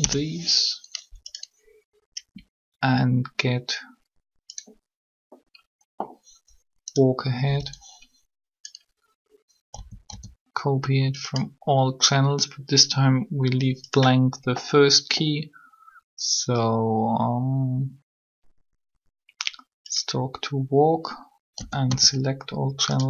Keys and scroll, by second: 0.0 Return, 7.4 b, 9.7 a, 10.1 a, 21.3 a, 21.6 a.